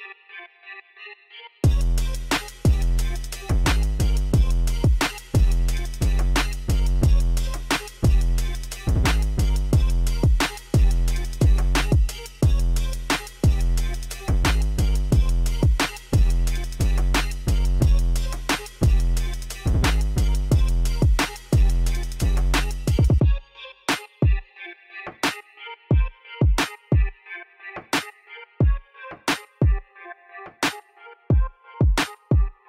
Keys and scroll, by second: 12.1 Tab, 13.5 a, 14.5 ctrl+e, 19.1 ctrl+r.